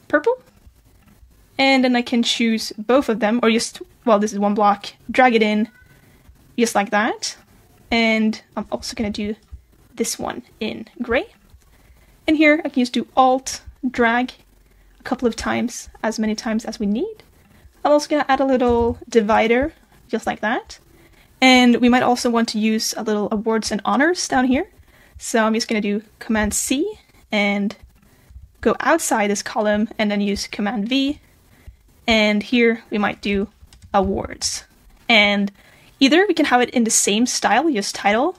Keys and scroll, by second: 26.4 super+c, 28.3 super+v.